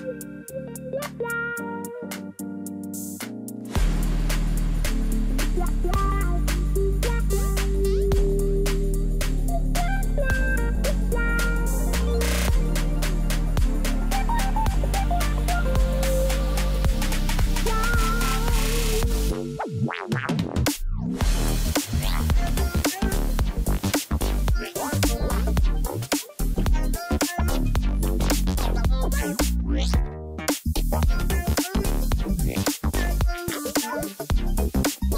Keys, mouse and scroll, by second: 1.4-2.0 scroll up 1, 2.3-4.4 scroll up 11, 9.6 ctrl+=, 9.9 ctrl+=, 11.2-12.5 scroll up 31, 12.5 scroll down 1, 12.6 scroll down 2, 13.1-13.8 scroll up 4, 14.0-14.4 scroll up 1, 15.1-15.4 scroll up 1, 15.4 ctrl+=, 15.5 ctrl+=, 18.0 right click, 26.6 ctrl+z.